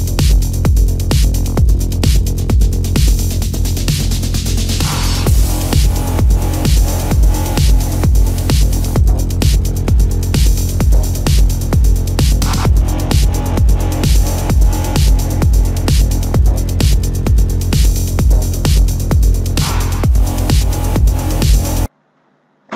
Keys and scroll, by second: 1.4 ctrl+=, 4.0 ctrl+=, 4.5 space, 6.4 ctrl+alt+z, 7.6 ctrl+alt+z, 9.3 ctrl+-, 10.0 ctrl+-, 11.2 ctrl+alt+z, 12.0 ctrl+alt+z, 12.9 ctrl+alt+z, 14.4 space, 15.2 space, 17.1 ctrl+alt+z, 17.6 ctrl+-.